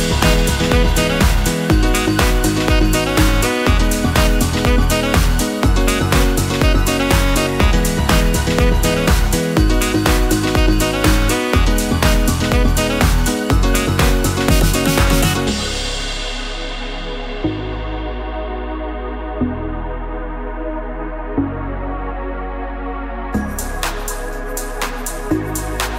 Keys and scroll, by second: 6.9 Return, 13.4 Return.